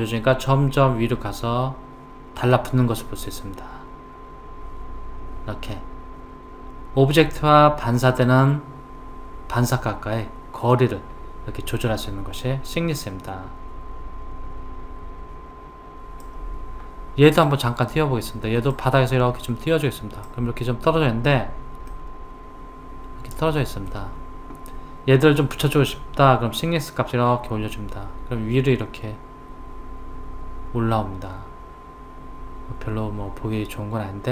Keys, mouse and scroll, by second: 17.3 click, 18.7 click, 21.9-24.9 middle drag, 26.6 click.